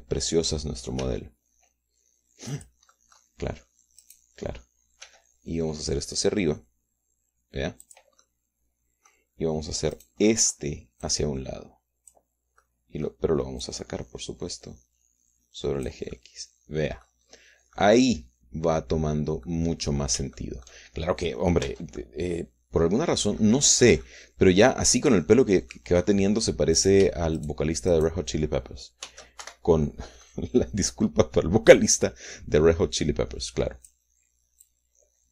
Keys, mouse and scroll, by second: 2.0 g, 3.4 click, 5.0 click, 6.0 g, 8.8 click, 9.2-10.2 drag, 10.9 click, 12.0-13.2 drag, 13.6 middle click, 14.6-17.0 drag, 17.1-18.2 middle drag, 18.2-18.7 scroll up 1, 18.7-20.6 middle drag, 21.3 shift+middle click, 22.6 Tab, 23.0-24.6 middle drag, 24.6 scroll up 1, 24.8 scroll down 1, 25.0-26.9 middle drag, 27.0-27.4 scroll up 1, 27.8 shift+click, 28.0 shift+right click, 28.9 shift+right click, 30.0 shift+d, 30.4 shift+Escape, 31.2 click, 32.7-35.0 drag.